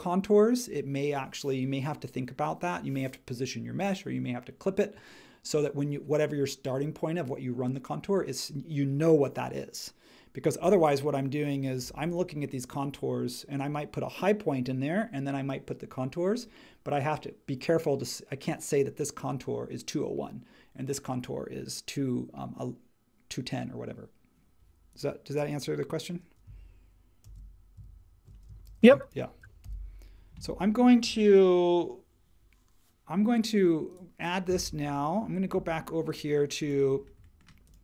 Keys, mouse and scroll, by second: 27.2 shift+x, 28.6 shift+x, 29.6 super+s.